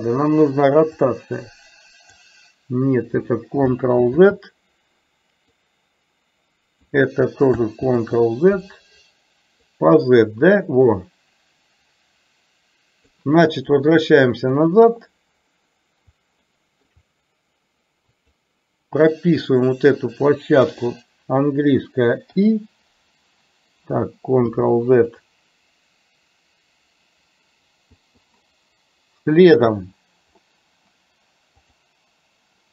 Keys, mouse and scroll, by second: 1.1-2.2 drag, 4.2 ctrl+z, 5.6-6.9 drag, 7.9 ctrl+z, 9.9-13.2 drag, 14.6 click, 16.6 shift+middle click, 18.3-25.3 drag, 27.9 i, 29.4 click, 31.7 click.